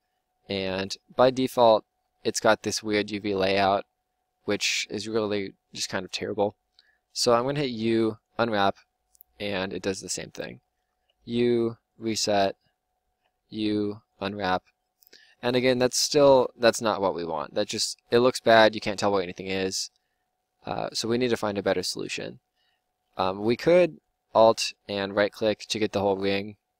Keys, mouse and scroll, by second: 7.5 u, 11.1 u, 13.2 u, 23.9-26.0 drag.